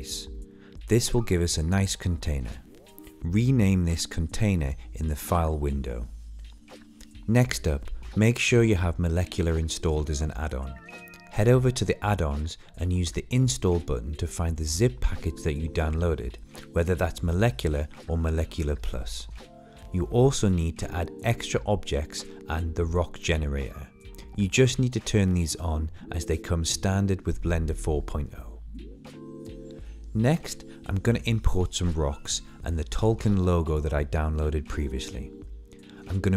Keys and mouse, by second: 0.4 Tab, 1.0 middle click, 1.8-3.6 drag, 4.4 click, 6.5-7.7 drag, 29.8-30.7 drag, 34.4-35.6 middle drag.